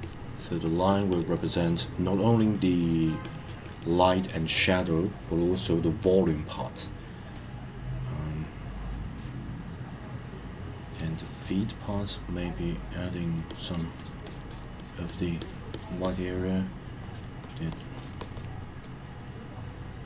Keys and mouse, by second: 0.0 click, 0.4 click, 0.6 click, 0.9 click, 1.1 click, 1.3 click, 1.6 click, 2.3 click, 2.5 click, 2.8 click, 3.0 click, 3.2 click, 3.5 click, 3.6 click, 3.8 click, 7.3-11.2 middle drag, 11.9 click, 13.3 click, 13.5 click, 13.7 click, 14.0 click, 14.2 click, 14.5 click, 14.8 click, 15.1 click, 15.4 click, 15.7 click, 16.0 click, 17.0 click, 17.4 click, 17.7 click, 17.9 click, 18.2 click, 18.3 click, 18.8-20.0 middle drag.